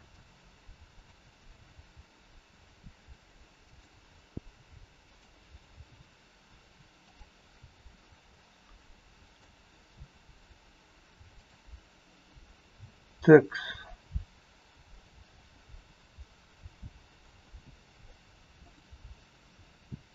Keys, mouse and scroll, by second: 0.9 click, 1.6 g, 4.3 g, 5.6 r, 7.6 g, 11.3 click, 14.7 middle click, 15.7 scroll up 3, 16.1 middle click, 17.0 scroll down 2, 17.4 middle click, 18.6 click.